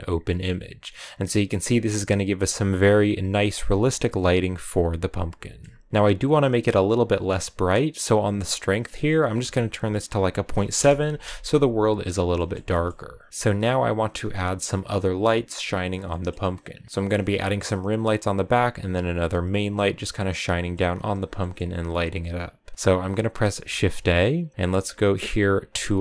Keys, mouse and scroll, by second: 0.0-1.4 drag, 1.4-6.0 middle drag, 6.0-8.5 scroll up 1, 10.6-12.3 drag, 12.3-16.7 middle drag, 16.7 scroll down 3, 17.9 scroll up 1, 19.6-20.2 scroll up 1, 20.2-26.0 middle drag.